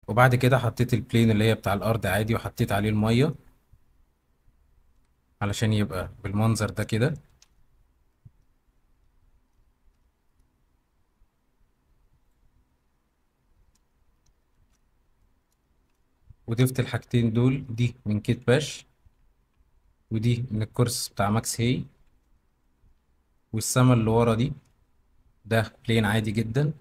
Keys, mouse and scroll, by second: 1.2 click, 4.9 z, 7.4 ctrl+b, 10.2 shift+middle drag, 13.9 shift+middle drag, 14.6 ctrl+b, 15.6 shift+middle drag, 16.0-16.5 ctrl+middle drag, 16.8 shift+middle click, 17.0 click, 17.6 click, 18.5 g, 19.5 Escape, 20.4 g, 22.0 Escape, 22.3-22.6 middle drag, 22.9-23.4 shift+middle drag, 23.8-24.3 shift+middle drag, 25.8-26.8 middle drag.